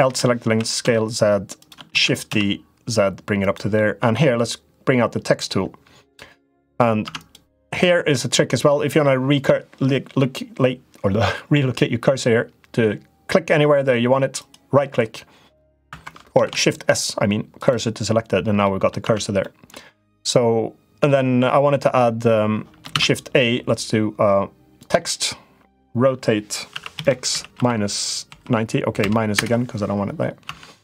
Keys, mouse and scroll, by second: 0.2 s, 1.7 shift+d, 3.6 middle click, 3.9 Tab, 5.8 click, 6.8 Tab, 7.0 click, 8.4 middle click, 14.2-15.9 right drag, 16.2 shift+s, 18.4 middle click, 18.8 Tab, 19.1 middle click, 22.6 shift+a, 26.5 r, 30.2 Tab.